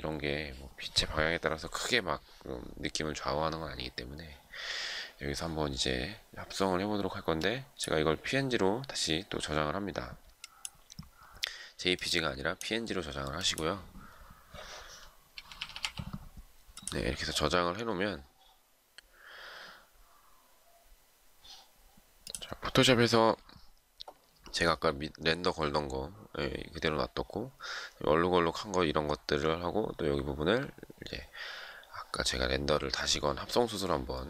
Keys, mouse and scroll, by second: 14.9-16.1 typing.